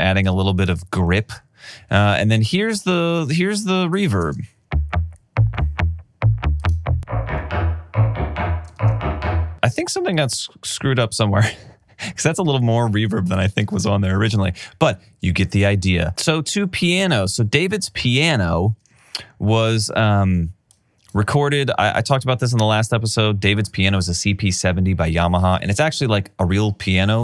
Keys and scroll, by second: 4.3 space, 8.8 alt+super+w.